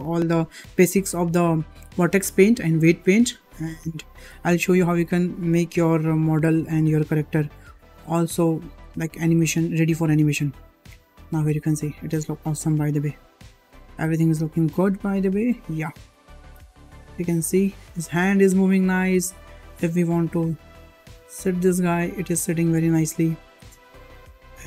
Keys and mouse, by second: 4.7-5.1 shift+middle drag, 5.5-5.9 middle drag, 6.8-7.2 middle drag, 7.9 shift+middle drag, 8.3-8.7 middle drag, 8.8 shift+middle drag, 9.3-9.8 middle drag, 10.6 click, 11.4 g, 13.5 g, 15.6 middle drag, 16.0 shift+middle drag, 17.3 middle drag, 18.1 g, 19.6 click, 19.9 g, 23.2 shift+middle click, 24.1 shift+middle click.